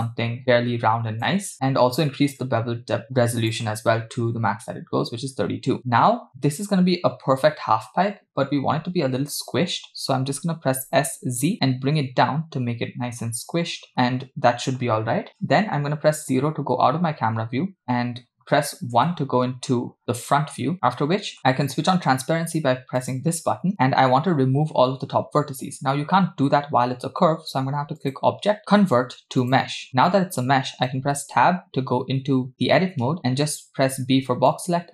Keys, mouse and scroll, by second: 2.4-3.6 drag, 10.8 s, 16.2 KP_0, 18.3-18.7 scroll down 2, 19.0 KP_1, 20.5 scroll up 1, 20.7 scroll down 2, 20.9 shift+middle click, 23.0 click, 28.0-29.7 drag, 31.1 Tab, 34.0 b.